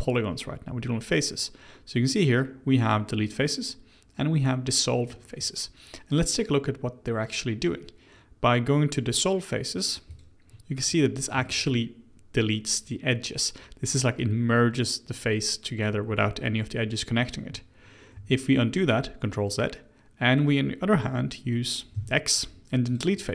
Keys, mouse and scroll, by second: 11.1-11.4 scroll up 1, 11.4-14.4 shift+middle drag, 18.1 ctrl+z, 21.9 x.